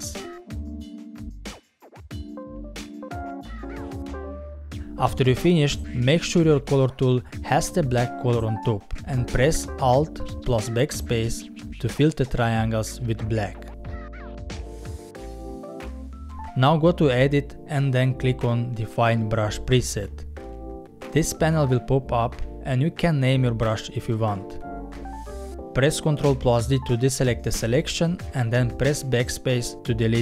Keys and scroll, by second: 9.7 alt+BackSpace, 25.6 ctrl+d, 28.3 BackSpace.